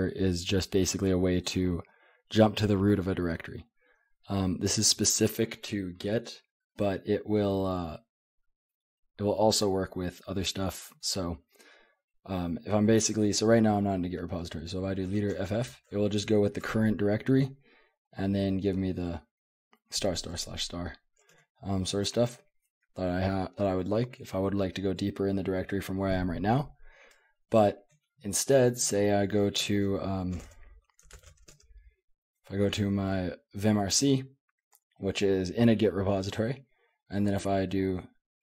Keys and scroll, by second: 0.3-1.8 typing, 8.3 k, 8.7 k, 8.9 k, 15.0 space, 15.4 f, 21.3 Escape, 30.0-35.7 typing.